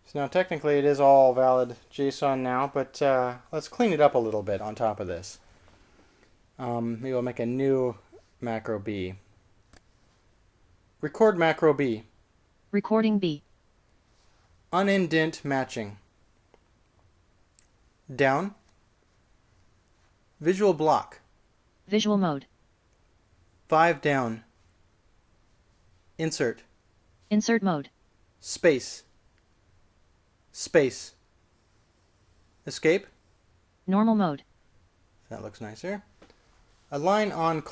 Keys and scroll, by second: 12.6-13.3 typing, 16.5-17.3 typing, 19.4 j, 21.9 ctrl+v, 25.2 typing, 27.4 shift+i, 30.1 space, 33.9 Escape.